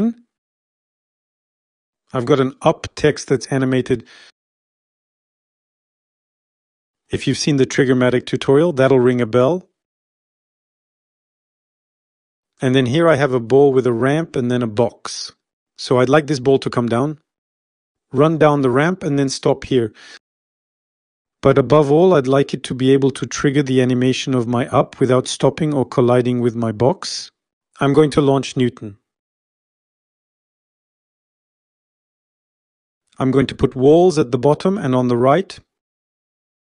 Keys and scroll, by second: 29.5 F5.